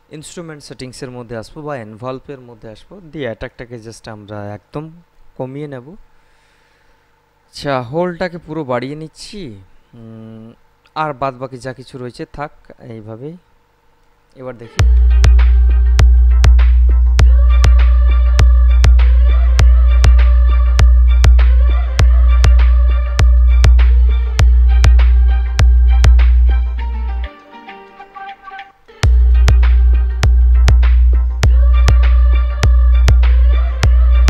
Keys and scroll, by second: 14.8 space, 28.9 space.